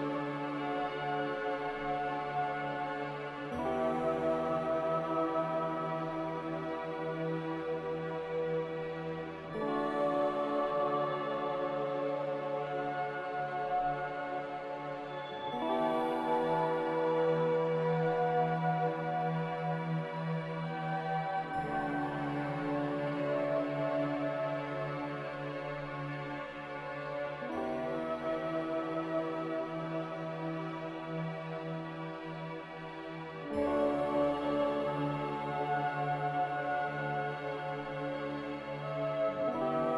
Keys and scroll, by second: 6.8 g, 8.1 z, 19.5-21.2 typing, 21.5 Return, 28.0 1, 28.0 5, 28.3 Return, 31.1 z, 34.0 2, 35.0 Escape, 35.1 Escape, 35.3 Escape.